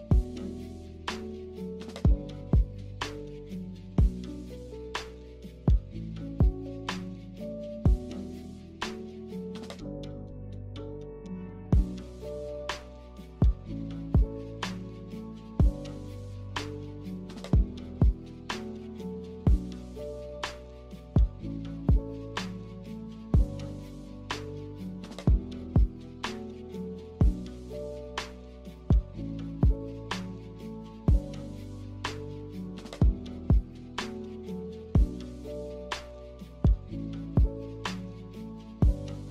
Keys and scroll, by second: 6.4 a, 15.4 a, 17.6 ctrl+c, 17.9 ctrl+v, 24.8 ctrl+c, 25.1 ctrl+v, 32.1 z.